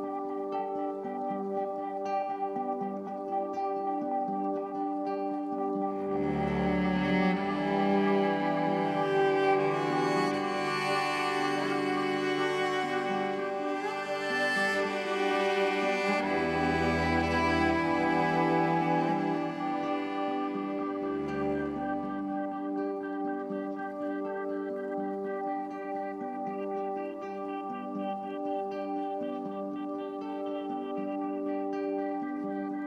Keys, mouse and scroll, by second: 0.2 g, 3.9 middle click, 4.2-5.8 drag, 5.8-7.3 alt+shift+middle drag, 7.3-8.6 alt+shift+drag, 8.6 Tab, 11.6 Delete, 12.0 click, 12.6 click, 13.5 e, 15.6 shift+click, 16.3 Tab, 17.7-22.8 drag, 22.8 r, 23.1 y, 24.2 click, 24.2-24.7 typing, 26.3 typing, 27.7 click, 28.2 typing, 30.6 alt+shift+click, 31.2-32.0 typing, 31.9 ctrl+alt+click, 32.7-32.8 alt+shift+drag.